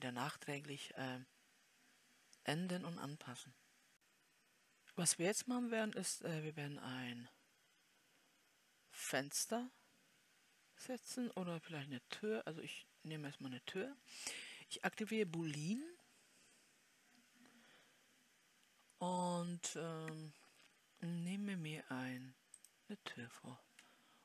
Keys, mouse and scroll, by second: 11.8-13.3 scroll up 1, 13.3-14.8 scroll up 1.